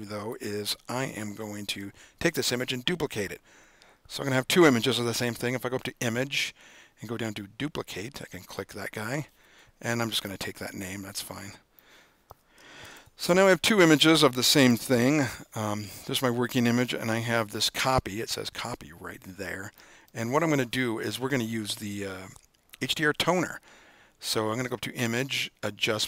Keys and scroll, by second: 12.9 super+-, 12.9 super+-, 14.6 super+-, 14.7 super+-.